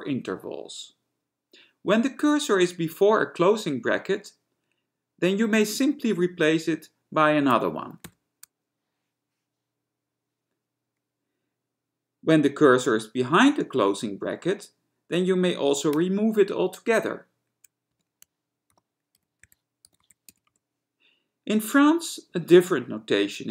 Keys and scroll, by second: 8.3 ), 16.1 BackSpace, 18.2-21.1 typing.